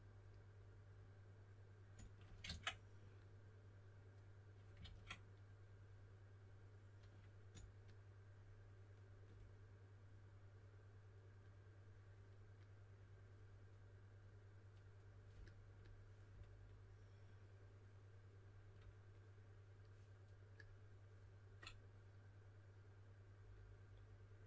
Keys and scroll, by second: 2.4 super+z, 4.8 super+z.